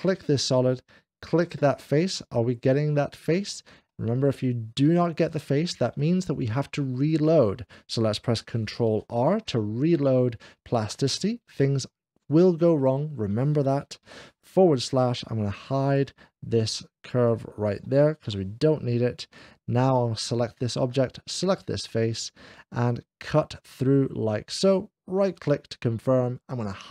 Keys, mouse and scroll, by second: 3.7-4.8 shift+middle drag, 5.8-7.8 shift+middle drag, 9.0 ctrl+r, 11.2 scroll down 1, 11.2 shift+4, 12.6 click, 13.9 /, 14.1 ctrl+r, 14.1 /, 15.7 click, 16.0-16.5 scroll down 1, 17.1 click, 18.3 h, 20.0 click, 21.2 shift+click, 22.4 click, 24.5-25.5 right drag, 25.5 middle click.